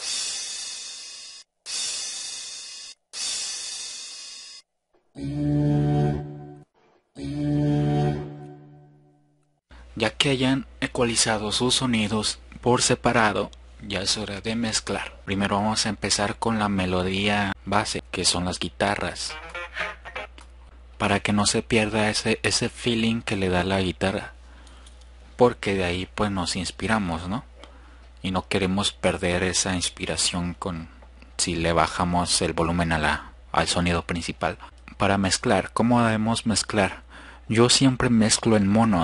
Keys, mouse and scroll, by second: 1.3-1.7 drag, 19.3-20.3 drag, 34.7-35.5 drag, 35.9 click.